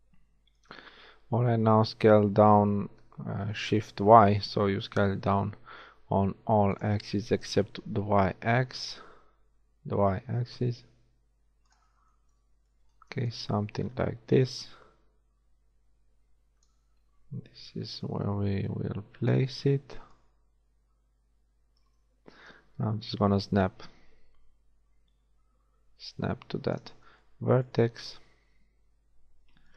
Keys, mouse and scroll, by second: 2.0 shift+s, 8.0 g, 12.6 a, 12.8 b, 17.8 a, 17.9 b, 20.2-22.0 drag, 28.9 a.